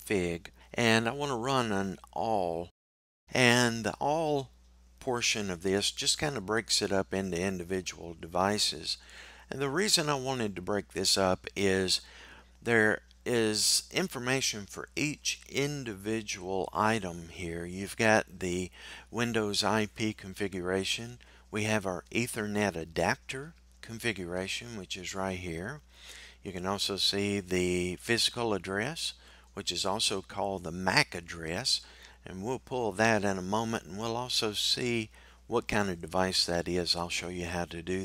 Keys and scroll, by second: 2.2 typing.